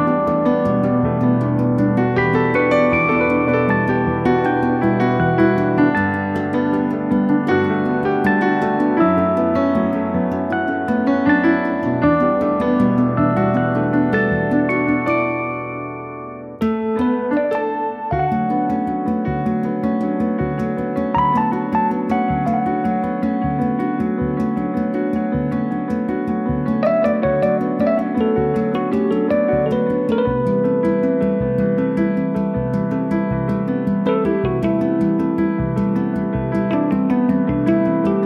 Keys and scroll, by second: 0.1 f, 1.3 1, 1.8 Return, 2.9 Escape, 3.2 r, 4.9 p, 5.8 5, 6.0 Return, 8.6 Return, 11.1 Escape, 12.9 s, 19.3 s, 20.9 space, 21.8 space, 26.8 Escape, 30.8 c, 32.4 3, 33.0 Return, 34.5 p, 35.4 1, 36.6 Return.